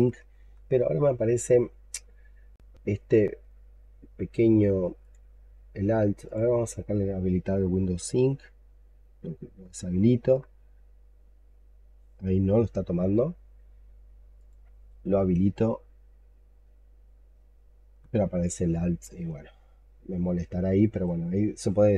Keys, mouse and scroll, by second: 9.1 alt+double click, 10.0 alt+click, 10.9 double click, 11.4 double click, 11.7 double click, 16.1 double click, 19.1 alt+click.